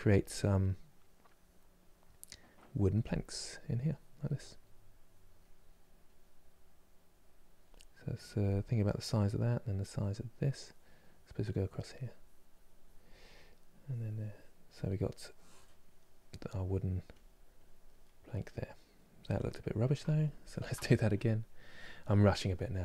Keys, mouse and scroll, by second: 2.8 middle click, 3.5 click, 4.0 middle click, 4.7 click, 5.0-9.3 middle drag, 9.3-14.5 drag, 14.5-16.2 middle drag, 16.2-17.7 drag, 17.7-19.7 middle drag, 19.7 ctrl+z, 20.1 ctrl+z, 20.9-22.2 drag, 22.2-22.8 middle drag.